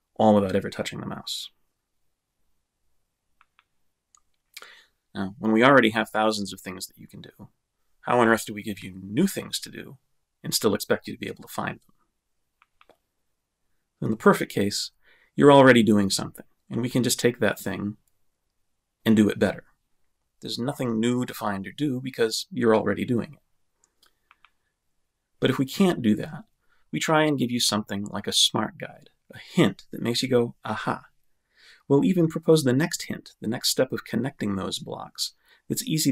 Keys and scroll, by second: 0.0-1.6 typing, 2.5 Return.